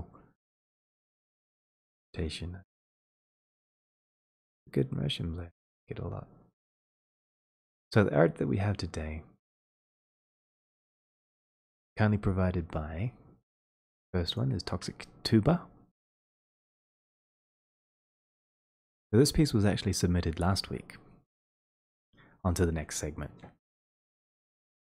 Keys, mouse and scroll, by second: 11.2-13.8 drag, 14.3 ctrl+click, 17.9 middle click, 19.2 click.